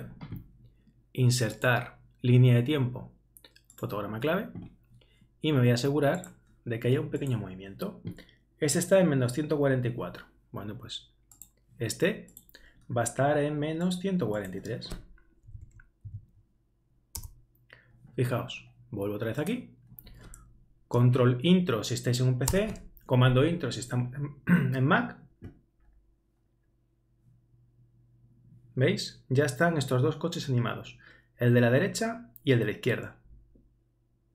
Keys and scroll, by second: 15.6 shift+Right, 16.0 shift+3, 22.5 super+Return.